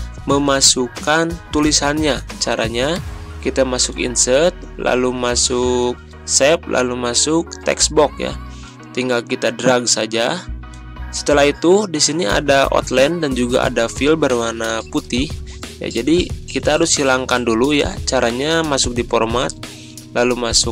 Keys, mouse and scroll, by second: 3.8 click, 10.7-13.2 drag, 16.7 click, 16.9 ctrl+scroll up 1, 18.2 scroll up 1.